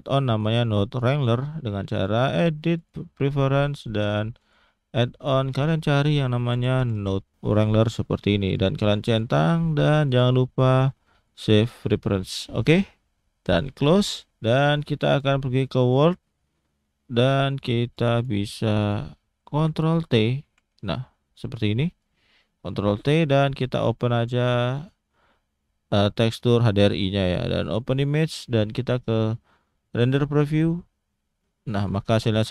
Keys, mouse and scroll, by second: 1.9 click, 14.1 click, 15.0 click, 16.7-17.6 scroll up 6, 17.6 middle click, 17.9 click, 18.2 click, 18.8 click, 20.4 ctrl+t, 21.2 scroll down 2, 22.0 click, 23.6 click, 30.7 click.